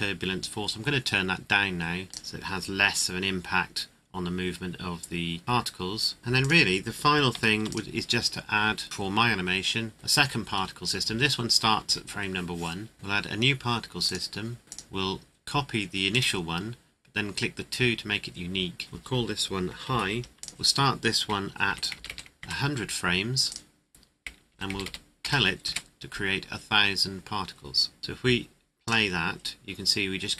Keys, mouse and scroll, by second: 2.2 KP_Enter, 6.2 click, 7.3 ctrl+s, 7.6 click, 8.8 right click, 9.9 click, 10.2-10.7 scroll up 1, 12.9 click, 18.8 click, 19.8 shift+h, 20.1 i, 20.4 click, 21.6 KP_1, 21.9 KP_0, 22.4 KP_Enter, 23.4 click, 24.5 KP_1, 24.6 KP_0, 25.6 KP_Enter, 28.0 ctrl+click.